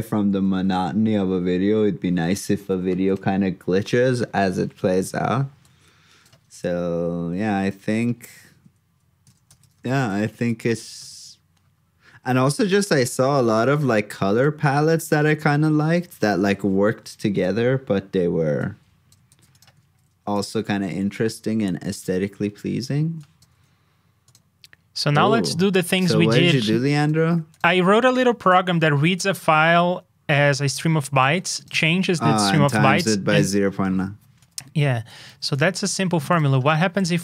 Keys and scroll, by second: 0.4 super+s, 6.9 alt+shift+Down, 11.1 super+s, 15.9 alt+shift+f, 16.9 super+s, 19.8 super+v, 27.2 super+c, 35.2 super+c, 36.6 super+v.